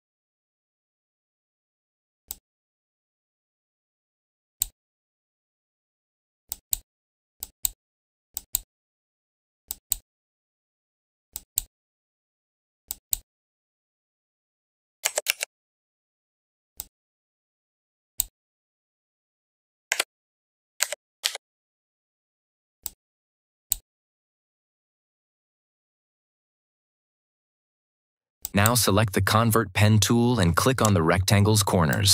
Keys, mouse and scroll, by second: 2.2-4.7 drag, 15.2 ctrl+t, 16.6-18.2 drag, 19.8 Return, 21.1 ctrl+=, 22.7-23.3 drag, 28.3 click, 30.6 right click, 31.8 click.